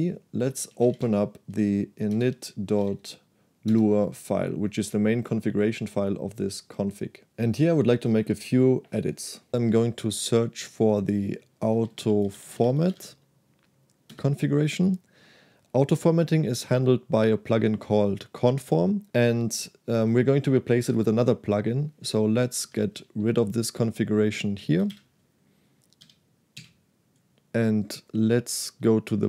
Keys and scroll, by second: 0.0-3.5 typing, 3.8 Return, 9.7 /, 11.4-13.6 typing, 14.2 Return, 22.6 0, 23.0 w, 24.0 shift+v, 24.9 shift+5, 26.1 j, 26.7 d.